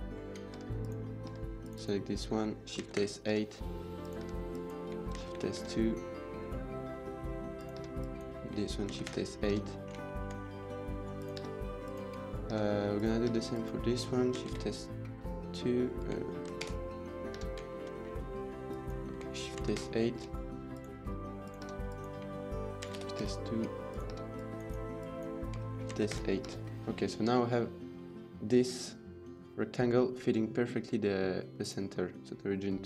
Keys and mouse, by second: 0.4 Tab, 0.6 click, 1.1 Tab, 1.4 click, 2.7 shift+s, 3.2 Tab, 3.9 click, 4.0 Tab, 4.4 click, 5.0 shift+s, 5.4 Tab, 6.7 click, 7.4 click, 7.6 Tab, 7.9 click, 8.9 Tab, 8.9 shift+s, 9.4 Tab, 9.7 middle click, 9.9 shift+middle drag, 10.2 middle click, 11.0 click, 11.2 Tab, 11.7 click, 12.3 Tab, 12.8 click, 13.1 Tab, 13.4 drag, 14.3 shift+s, 14.3 KP_2, 16.5 shift+s, 16.5 KP_2, 17.3 Tab, 17.5 shift+middle drag, 18.2 middle click, 18.5 drag, 19.5 shift+s, 20.1 Tab, 20.5 click, 21.2 click, 21.5 Tab, 21.7 drag, 22.8 shift+s, 23.1 Tab, 23.7 click, 24.0 Tab, 24.1 click, 24.7-25.1 drag, 25.8 shift+s, 26.4 Tab, 26.7 middle drag, 27.4 middle drag, 28.4 drag, 31.4 click.